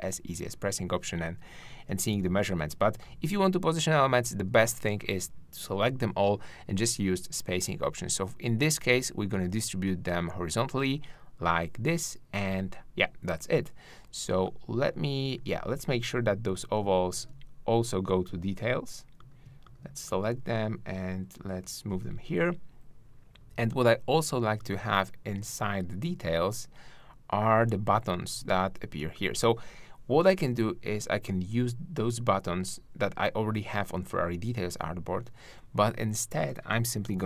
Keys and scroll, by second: 15.4 super+z.